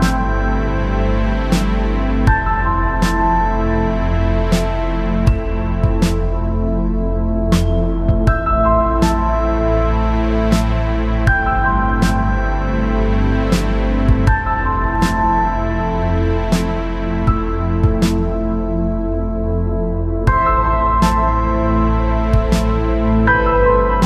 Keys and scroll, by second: 3.0 ctrl+=, 5.4 s, 12.5 ctrl+0, 12.7 ctrl+-, 16.3 ctrl+0.